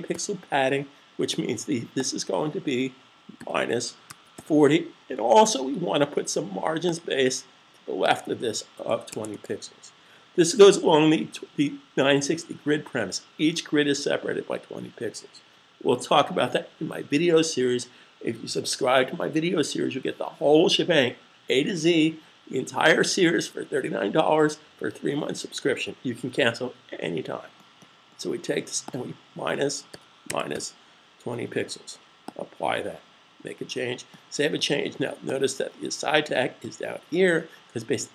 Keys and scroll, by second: 2.1-3.6 typing, 7.7-8.5 typing, 28.8-29.9 typing.